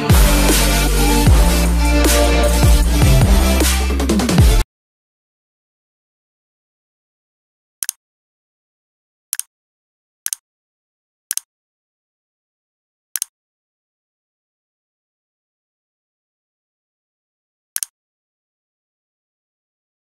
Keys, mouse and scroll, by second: 0.0 Right, 2.2 click.